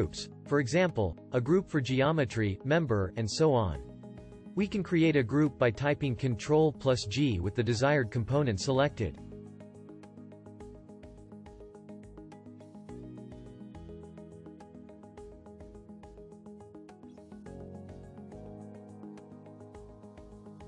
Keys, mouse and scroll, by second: 7.5 g.